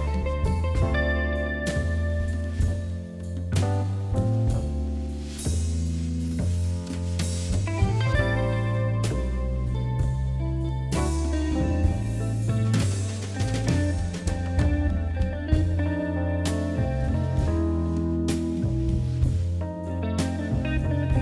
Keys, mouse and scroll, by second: 0.4-1.6 middle drag, 1.8-2.1 scroll up 5, 2.1 middle click, 2.4-2.8 scroll down 2, 2.8 middle click, 3.2 Tab, 3.5 scroll up 1, 3.7 middle click, 4.4 click, 4.7 middle click, 5.2 shift+click, 5.8 click, 6.8 KP_3, 7.9 g, 9.0 r, 10.2 g, 10.9 middle click, 11.1 scroll up 4, 11.2-12.3 shift+middle drag, 12.3 click, 13.7 r, 14.4 scroll up 2, 14.6 scroll down 2, 14.7 middle click, 15.2-15.5 scroll down 1, 15.5 click, 15.9 shift+click, 16.3 middle click, 16.8 shift+click, 17.1 shift+click, 17.5 shift+click, 18.5 g, 20.5 KP_1, 20.8 scroll down 1, 21.1 g.